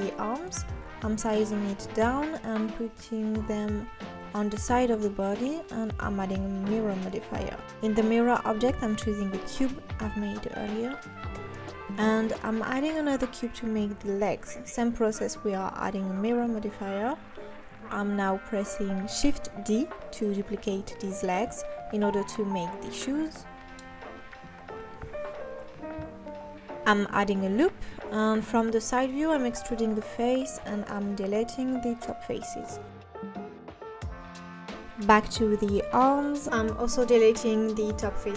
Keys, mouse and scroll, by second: 0.2 g, 0.8 click, 1.4 g, 2.3 g, 2.9 click, 3.1 g, 3.5 click, 4.2 g, 4.6 click, 4.8 g, 5.5 Tab, 5.9-6.2 scroll up 2, 6.2 scroll down 2, 6.5 KP_3, 7.2 s, 8.2 s, 8.3 KP_1, 8.5 Tab, 8.8 Tab, 9.0-9.4 scroll up 4, 9.4 click, 9.5 g, 10.2 click, 10.4 g, 12.5 scroll down 3, 12.8 s, 13.3 g, 14.2-14.5 scroll up 3, 14.8 Tab, 15.0 click, 15.2 g, 16.0 Tab, 16.6 KP_3, 17.1 s, 17.4 g, 18.1 KP_1, 18.6-22.2 drag, 22.2-22.6 scroll up 2, 22.6-22.9 scroll down 3, 22.9 scroll up 1, 23.0 click, 23.2 shift+d, 23.6 s, 24.5 g, 24.8 Tab, 25.0 click, 25.2 g, 26.7 click, 27.5 KP_3, 28.1 click, 29.2 g, 29.9 ctrl+z, 30.2 e, 31.2 KP_1, 31.5 Tab, 31.6-32.2 scroll up 3, 32.2 click, 33.0 x, 33.7 x, 34.0 Tab, 34.5 click, 35.1 Tab, 35.4 click, 35.8 x, 36.0 x, 36.3 click, 36.4 click, 37.5 Tab.